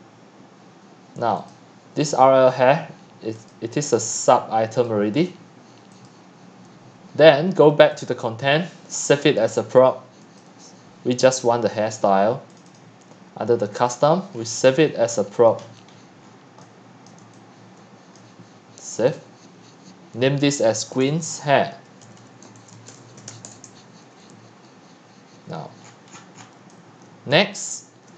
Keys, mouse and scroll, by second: 1.8 middle click, 1.8-3.5 scroll down 7, 3.5-9.7 drag, 12.5 click, 13.9 click, 14.4-15.3 scroll, 15.6 click, 15.6 middle click, 15.6 scroll up 1, 15.7 scroll, 15.9 scroll, 16.2 scroll, 16.2 scroll, 16.3 scroll, 17.0 x, 17.1 click, 18.2-21.0 drag, 20.8-23.8 typing, 25.8 click, 26.1-26.6 scroll, 26.4-28.1 typing, 27.6 click.